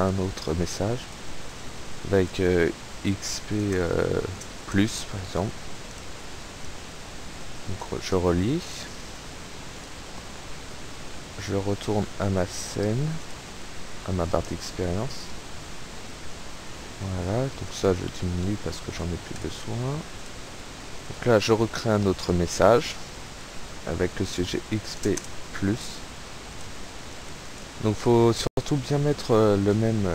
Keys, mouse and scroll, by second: 1.1 click, 1.6 click, 1.8-2.6 typing, 6.0 click, 6.6-8.1 drag, 8.5 click, 9.8 click, 11.8 click, 12.7 click, 13.3 click, 17.7 click, 18.2 KP_1, 18.7 KP_0, 19.3 click, 20.2 click, 21.2 click, 22.2 click, 23.5 click, 23.6-24.5 typing, 24.7 click, 27.2 click, 28.0 click.